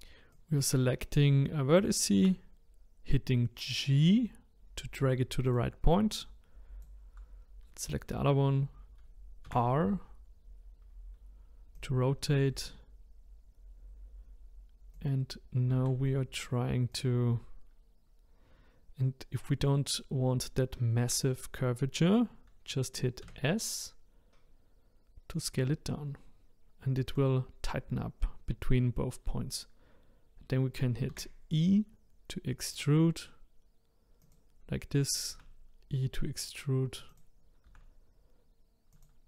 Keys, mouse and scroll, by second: 0.3 click, 2.2 g, 6.2 click, 9.5 r, 15.8 g, 23.2 s, 31.1 e, 35.3 e, 37.7 e.